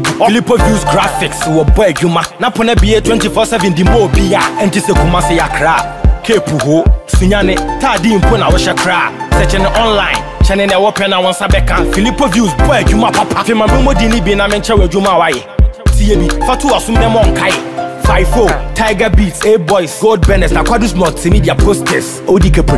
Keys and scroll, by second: 17.3 ctrl+-, 17.8 ctrl+j, 20.7 ctrl+t.